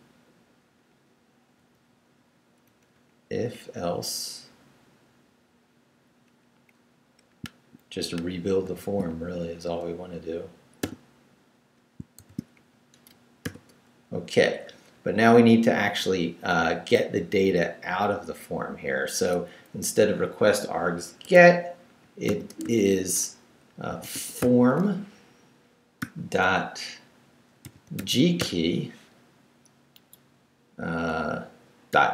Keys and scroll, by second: 0.9 Down, 1.7 Left, 2.6 Up, 3.5 Down, 6.1 Down, 6.5 Up, 7.4 shift+Up, 8.6 shift+v, 9.1 shift+Down, 10.0 Down, 10.8 d, 12.2 shift+v, 12.5 shift+Down, 13.4 shift+,, 14.1 shift+Up, 17.2 Down, 17.6 Right, 21.2 Escape, 22.2-24.9 typing, 27.4-28.9 typing.